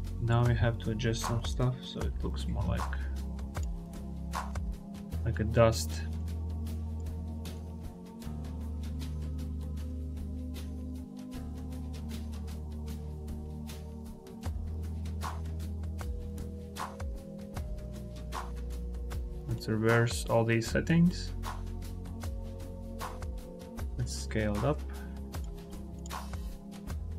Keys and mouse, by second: 0.3-2.4 drag, 3.4 click, 4.3-5.0 drag, 6.0 click, 7.4-10.6 drag, 11.7 click, 16.4 click, 17.1 click, 17.5 click, 19.3 click, 21.0 click, 23.0 click, 24.4 click, 25.4 click.